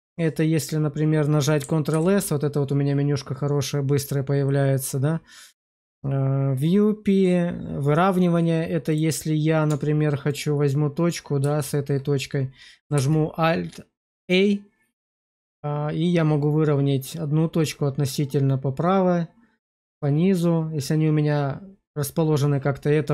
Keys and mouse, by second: 0.5 click, 1.8 ctrl+s, 8.8 click, 9.6 Tab, 10.2 click, 11.5 shift+click, 12.8 alt+a.